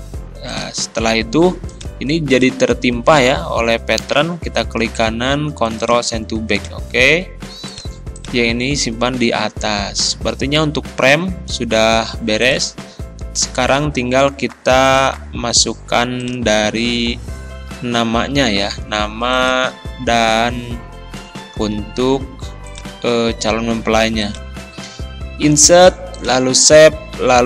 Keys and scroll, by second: 3.2 ctrl+z, 21.6 ctrl+c.